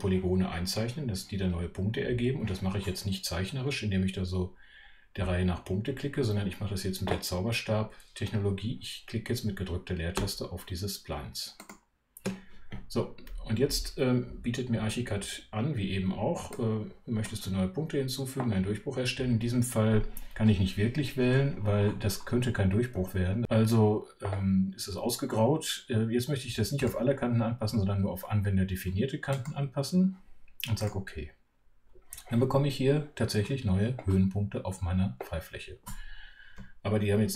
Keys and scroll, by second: 10.1 space.